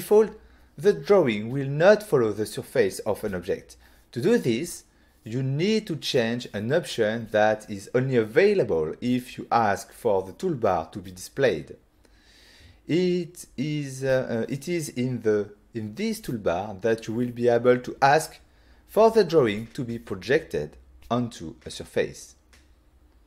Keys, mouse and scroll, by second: 4.9 click, 14.1 right click, 20.7 click, 21.4 click.